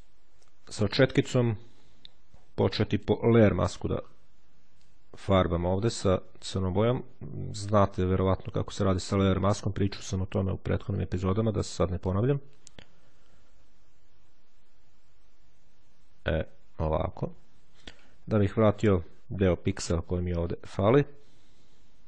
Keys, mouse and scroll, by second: 2.8 click, 3.8-4.3 ctrl+scroll up 2, 4.7-18.2 ctrl+drag, 19.6-20.1 shift+scroll up 2, 20.9-22.0 drag.